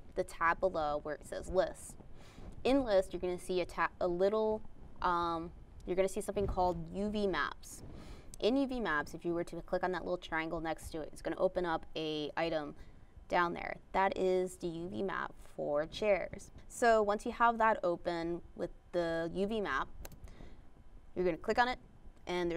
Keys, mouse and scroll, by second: 0.1 click, 0.9 click.